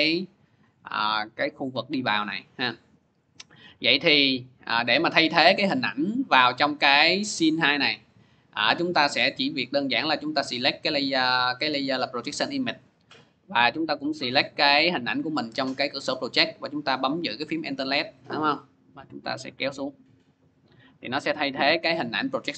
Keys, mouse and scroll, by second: 6.6 click, 9.0 click, 10.4 click, 13.8 click, 14.6 click, 19.5 alt+click, 19.6 alt+click.